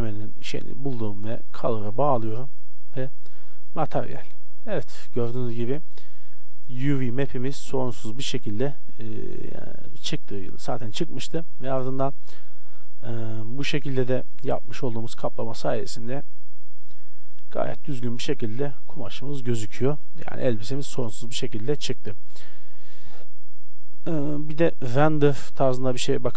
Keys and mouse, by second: 3.9-4.5 middle drag, 6.3-9.9 middle drag, 12.3-14.7 middle drag, 23.8-25.7 drag.